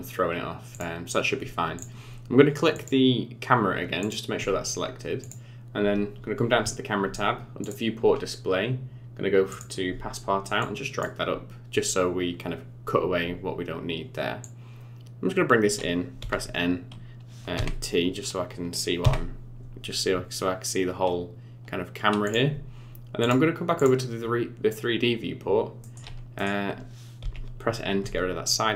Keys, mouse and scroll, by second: 0.7 click, 1.8 click, 2.7 click, 4.0 click, 5.2 click, 7.6 click, 8.0 scroll down 4, 9.5 click, 9.9 scroll down 5, 10.6 click, 14.4 click, 16.2 n, 17.6 t, 19.0 Home, 19.9-20.2 scroll down 1, 22.3 click, 23.2 click, 25.1-25.5 scroll down 8, 25.8 middle click, 26.4 middle click, 27.2 n.